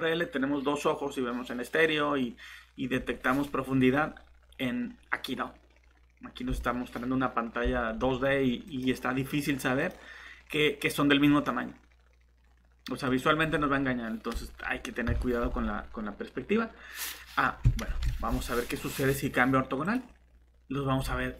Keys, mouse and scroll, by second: 15.0 shift+Delete, 17.8 ctrl+z.